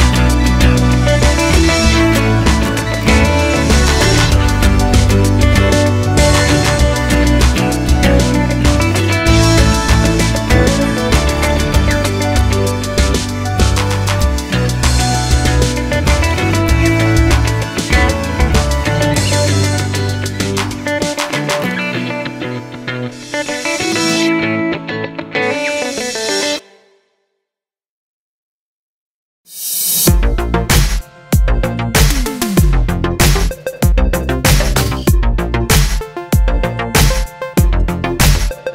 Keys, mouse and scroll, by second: 0.2 click, 1.0 2, 1.2 click, 1.5 shift+click, 1.7 x, 2.6-6.3 middle drag, 4.3 Tab, 6.3 click, 6.6 shift+click, 6.9 shift+click, 7.1 x, 8.2-16.6 middle drag, 8.9 ctrl+z, 16.6 click, 17.1 shift+click, 17.7 f, 17.9 click, 18.4 f, 18.7 click, 19.0 shift+click, 19.2 f, 19.3 middle click, 19.8 click, 20.2 shift+click, 20.3 f, 21.7-24.2 middle drag, 24.1 3, 24.2 click, 24.5 shift+click, 24.8 middle click, 25.1 shift+click, 25.4 middle click, 25.7 shift+click, 26.0 x, 27.5 middle click, 28.1 click, 28.3 x, 28.6 middle click, 29.0 click, 29.3-31.4 middle drag, 30.0 z, 33.5 KP_1, 34.9 middle click, 35.6 KP_1, 36.0 e, 38.2 click, 38.4 middle click.